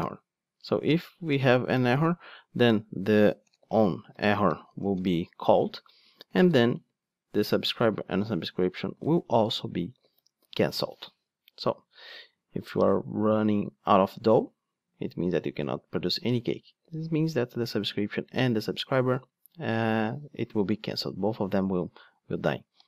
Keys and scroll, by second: 9.1 super+c, 9.9 super+v.